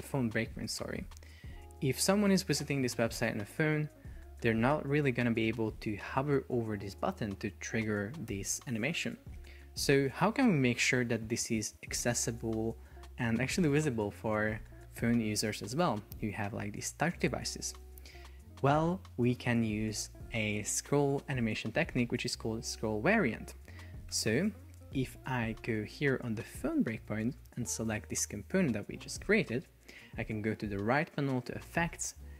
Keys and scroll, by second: 24.2 Escape.